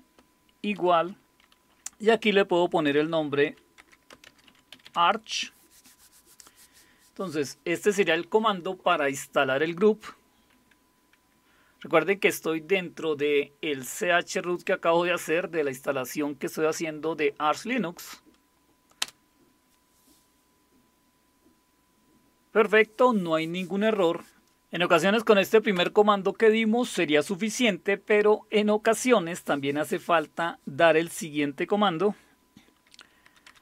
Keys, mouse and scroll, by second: 0.8 typing, 2.9-5.3 typing, 19.0 Return, 25.7 Up, 33.2-33.6 typing.